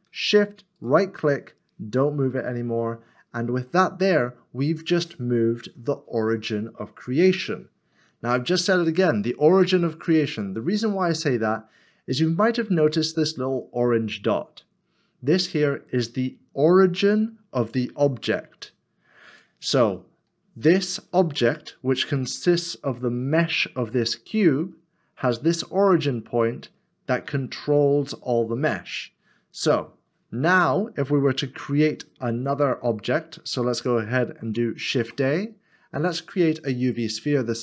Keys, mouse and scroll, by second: 0.8 shift+right click, 3.3 middle click, 3.5-4.0 scroll down 1, 6.6 middle click, 27.3 middle click, 34.9 shift+a.